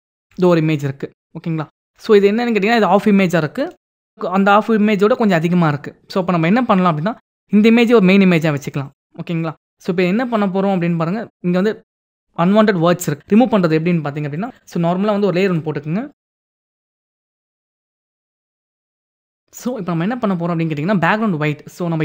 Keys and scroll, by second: 3.9 ctrl+Tab.